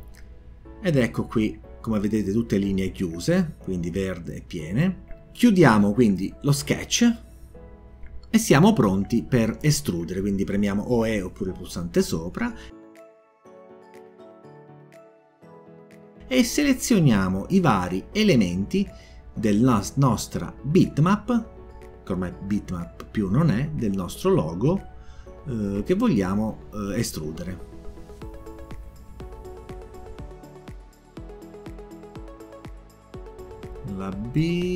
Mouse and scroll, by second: 6.0 click, 16.9 scroll up 1, 17.5 scroll down 1, 18.3 click, 19.4 click, 20.0 click, 21.0 click, 21.6 click, 23.2 click, 23.9 click, 25.8 click, 26.9 scroll up 1, 27.3 scroll down 1, 28.4 click, 29.6 click, 30.7 click, 33.2 click.